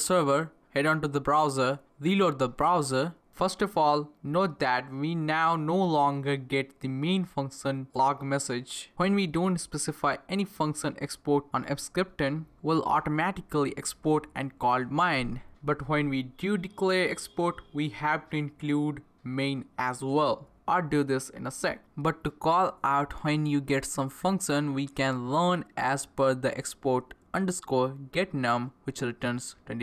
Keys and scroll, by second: 0.1 Up, 0.2 Return, 3.6 Return, 28.2-29.8 typing.